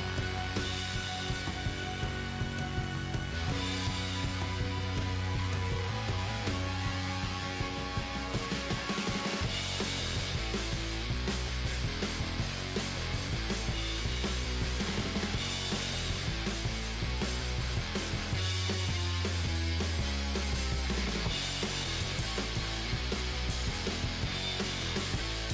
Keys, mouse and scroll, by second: 1.7-4.0 middle drag, 3.4 g, 4.0-8.2 right drag, 4.2 g, 6.2 g, 7.0 g, 8.2-10.4 middle drag, 11.0-12.9 right drag, 12.1 g, 14.0 right click, 14.2 g, 15.9 middle click, 16.8 right click, 17.0 right click, 18.1 g, 20.2-23.5 middle drag, 21.2-23.0 right drag, 23.5-25.5 drag, 24.3 g.